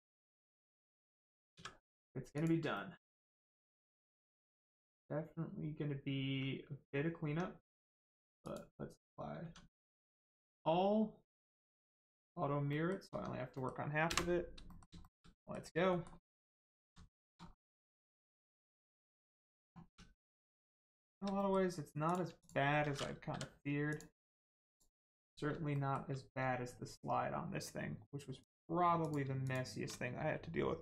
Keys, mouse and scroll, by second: 0.0 middle click, 0.5 Tab, 0.7 middle click, 2.3 click, 2.7 middle click, 4.3 shift+middle click, 4.6 middle click, 7.2 Tab, 8.4 click, 9.4 Tab, 10.3 click, 12.6 middle click, 13.0 Tab, 13.5 middle click, 14.6 middle click, 15.0 shift+middle click, 15.3 middle click, 16.9 shift+scroll up 1, 17.0 shift+middle click, 17.4 middle click, 17.7 middle click, 18.1 shift+middle click, 20.4 click, 20.8 shift+middle click, 21.3 middle click, 21.4 middle click, 22.0 click, 22.3 shift+click, 23.2 m, 23.8 click, 24.9-25.4 scroll up 1, 25.6 shift+middle click, 28.3 click, 29.4 shift+click.